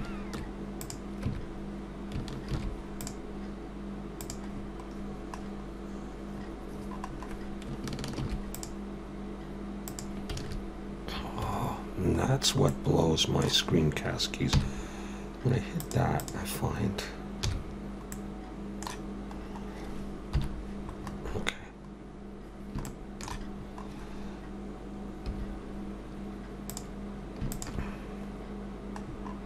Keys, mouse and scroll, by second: 4.2 Tab, 4.2 ctrl+r, 4.5 scroll down 1, 5.2-5.5 scroll down 10, 6.3-7.1 scroll up 9, 8.2 ctrl+r, 18.1 middle click, 19.4-20.3 scroll up 1, 20.3 scroll up 1, 20.3 KP_7, 21.0-22.3 scroll up 2, 22.3 scroll down 1, 22.8 shift+middle click, 23.6-25.3 scroll up 1.